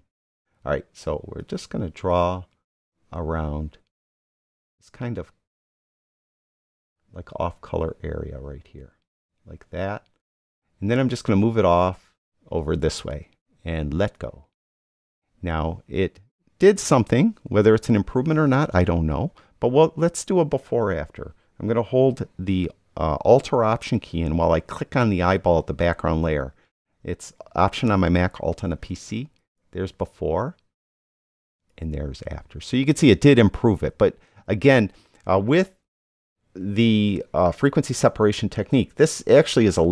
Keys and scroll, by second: 17.2 super+d.